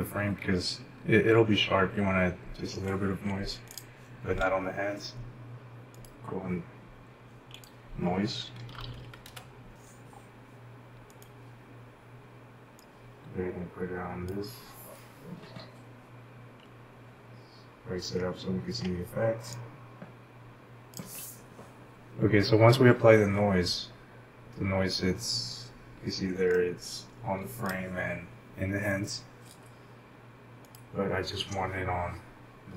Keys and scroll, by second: 8.4-9.5 typing, 11.2 Return.